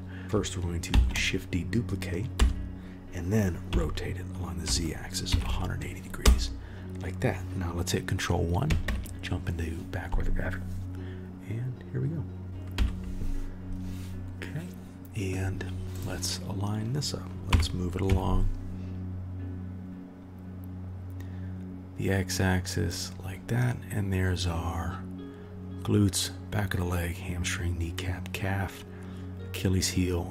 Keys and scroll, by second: 0.2 ctrl+z, 0.9 shift+d, 3.7 r, 8.8 ctrl+KP_1, 12.4 ctrl+z, 12.7 Delete, 17.5 g.